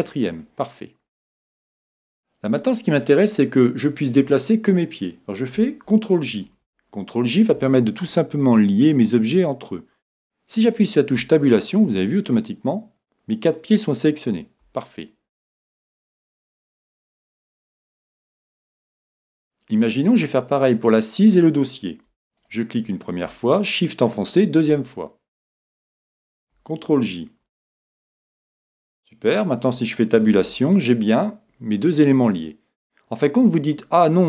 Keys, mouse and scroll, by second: 0.4-2.3 middle drag, 0.4 right click, 6.5 ctrl+j, 8.1-10.0 middle drag, 11.2 Tab, 11.6-13.5 middle drag, 13.6-14.6 middle drag, 14.6 Tab, 16.4-17.6 scroll up 1, 17.6-19.5 middle drag, 22.4 right click, 27.5 ctrl+j, 28.2-30.2 middle drag, 30.4 Tab, 30.9-32.8 middle drag.